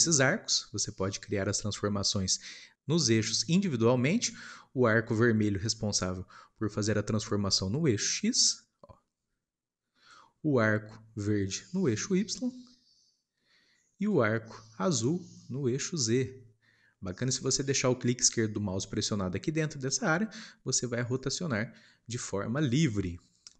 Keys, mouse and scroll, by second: 7.7 click, 11.6 click.